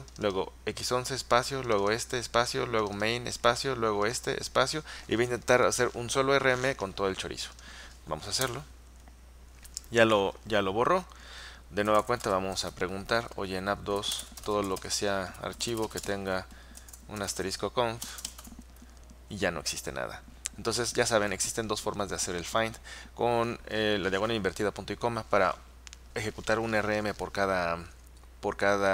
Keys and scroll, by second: 8.5 Return, 11.8-19.0 typing.